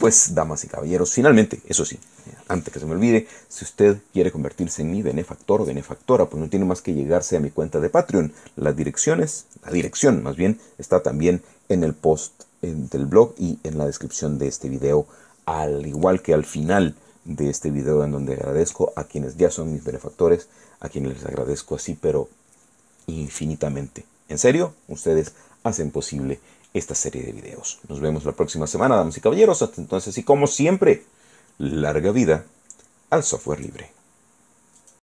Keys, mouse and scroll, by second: 33.7 click, 35.0 click.